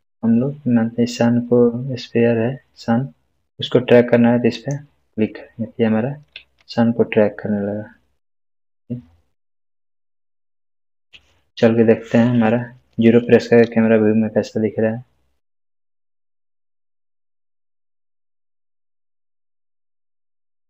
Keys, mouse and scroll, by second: 4.5 click, 6.3 space.